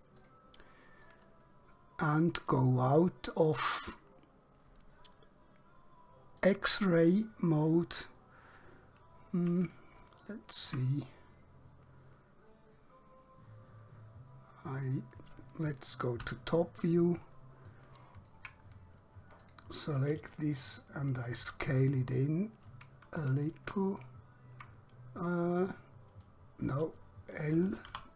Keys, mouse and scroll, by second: 0.2 click, 1.2 middle click, 6.4 click, 8.8-9.2 scroll up 1, 10.1 shift+middle click, 11.0 middle click, 16.2 KP_7, 18.8-19.5 scroll up 1, 19.5 click, 21.5 s, 26.2 right click, 27.9 l.